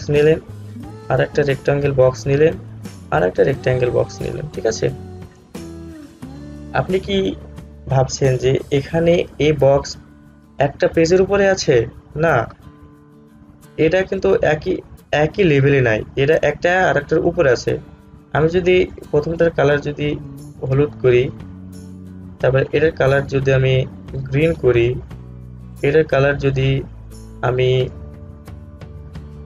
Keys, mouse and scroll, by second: 13.9-19.0 drag, 19.0-29.4 drag.